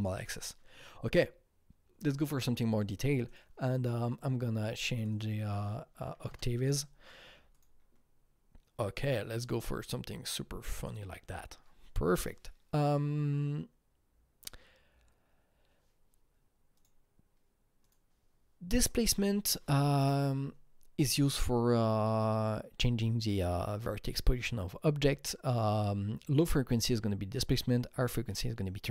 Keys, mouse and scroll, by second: 3.2 click, 5.1 double click, 6.0 double click, 6.0 KP_8, 6.2 KP_Enter, 7.5 click, 10.8 KP_Enter, 10.8 click, 16.7 KP_Enter, 16.7 click, 18.0 click, 18.8 click.